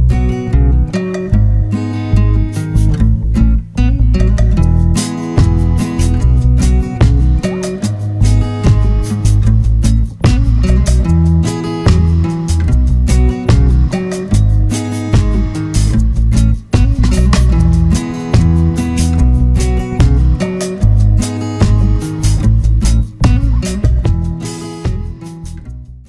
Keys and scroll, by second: 0.0 ctrl+=, 6.1 F5.